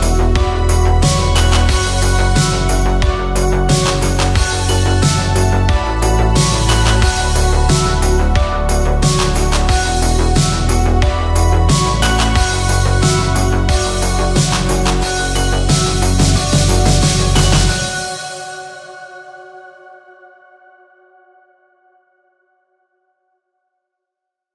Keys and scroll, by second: 3.7 alt+Tab, 5.5 alt+Tab, 5.7 space, 23.1 ctrl+w.